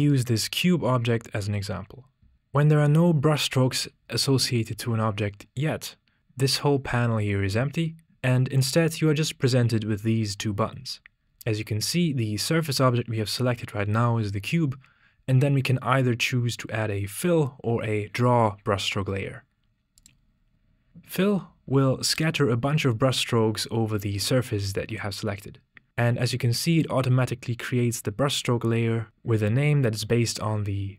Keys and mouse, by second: 20.0 click.